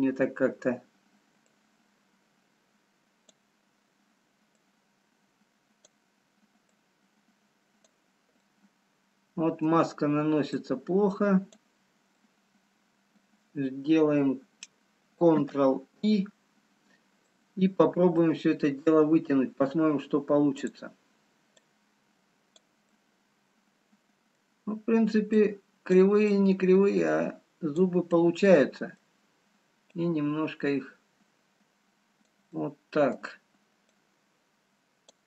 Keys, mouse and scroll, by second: 0.1 middle click, 2.6 click, 6.7 click, 9.6 middle click, 10.8 click, 13.1 middle click, 17.1 ctrl+i, 17.1-17.8 scroll down 3, 18.4 middle click, 21.1 click, 23.2 click, 23.2 middle click, 25.3 click, 26.6 click, 28.3 middle click, 31.1 click, 32.6 middle click.